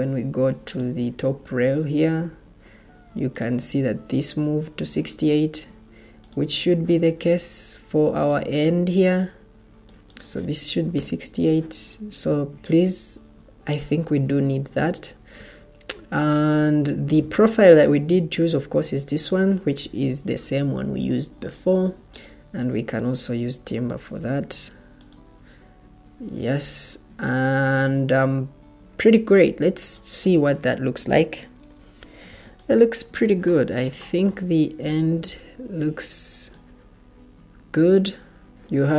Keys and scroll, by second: 10.5-11.3 typing, 23.2 t, 23.7 t, 31.7 Escape, 32.2 o.